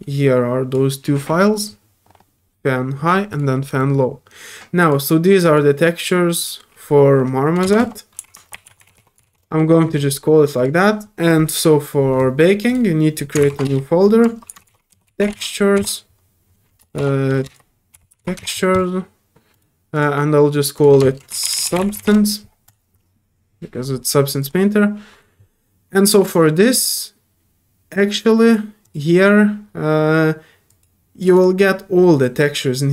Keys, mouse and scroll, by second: 3.3 click, 4.8 click, 5.4 click, 6.4 click, 9.9 click, 10.5 click, 12.7 click, 18.7 click, 19.5 click, 19.9 click, 20.7 click, 22.6 click, 24.4 click, 28.8 click, 30.7 click, 31.2 click, 31.3 click.